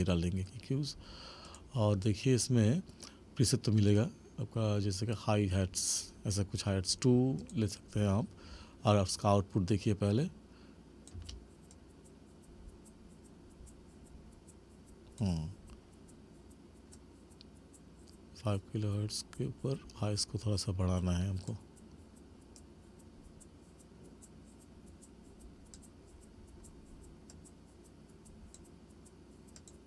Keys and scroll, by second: 11.2 space.